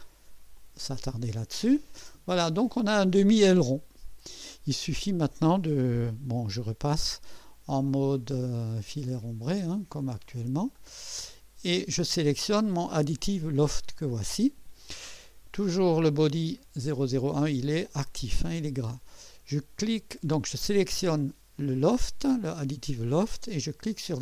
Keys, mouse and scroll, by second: 0.5 click, 1.7-2.1 scroll down 1, 2.3-4.3 drag, 9.1 click, 10.0 click, 10.8-11.9 drag, 13.1 click.